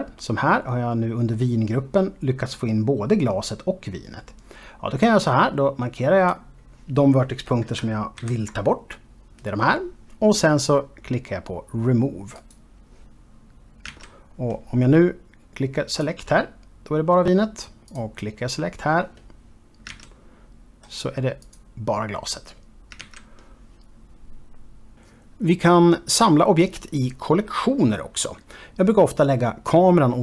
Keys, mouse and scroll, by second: 5.9 click, 9.1 ctrl+l, 13.6 click, 14.8 alt+a, 16.9 click, 18.9 click, 20.9 alt+a, 22.4 click, 24.0 alt+a.